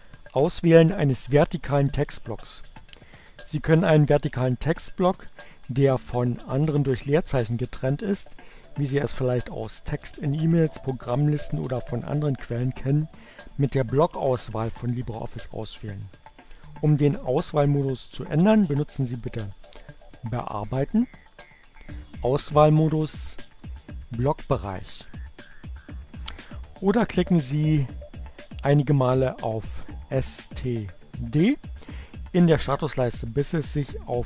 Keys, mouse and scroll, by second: 20.6 click, 23.6-25.0 drag, 30.2 click, 33.6-34.2 drag.